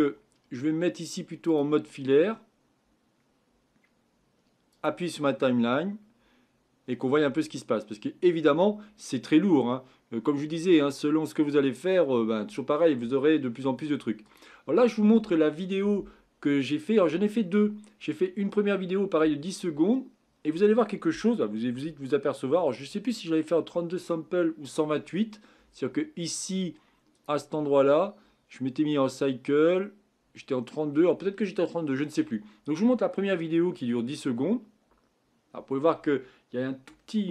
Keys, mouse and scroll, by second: 3.7 Left, 4.7 click, 14.9 click, 27.1 click.